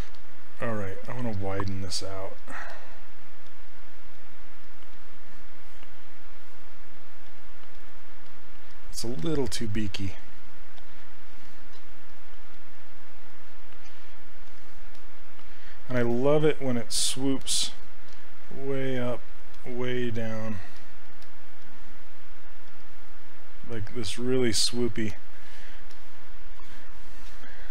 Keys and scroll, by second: 0.1 s, 7.3 s, 11.8 s, 16.0 s.